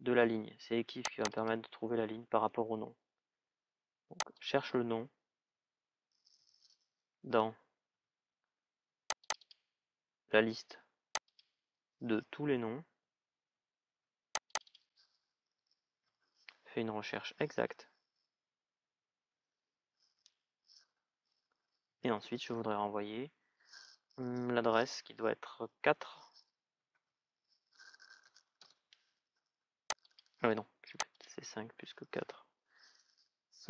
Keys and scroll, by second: 18.6 shift+à, 26.8 shift+', 28.3 Return, 31.9 BackSpace, 33.4 shift+(.